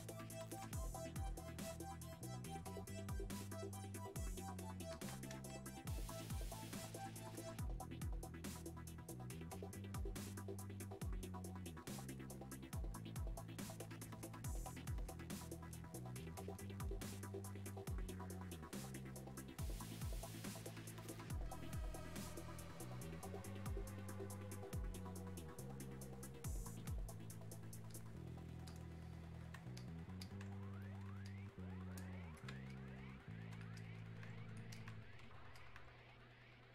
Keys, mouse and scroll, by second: 1.6 click, 5.6 space, 6.4 click, 6.6 space, 7.8 click, 32.8 alt+click.